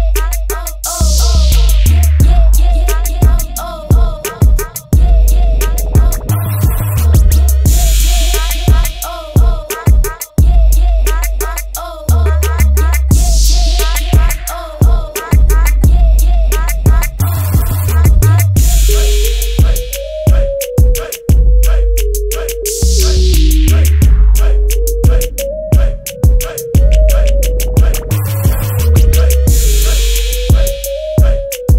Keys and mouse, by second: 6.4 Tab, 7.6 click, 10.5 Tab.